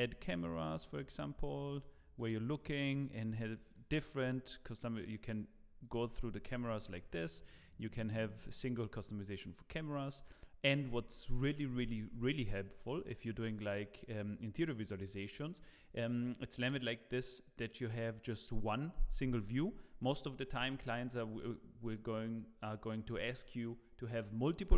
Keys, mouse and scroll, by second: 0.8 click, 1.3-1.7 scroll down 4, 1.8 middle click, 2.9 click, 3.3 scroll down 1, 3.5 middle click, 4.2 scroll down 1, 4.5 middle click, 5.3 click, 6.9 click, 12.5 click, 12.9 click, 13.6 middle click, 14.6 click, 15.3-16.1 scroll down 1.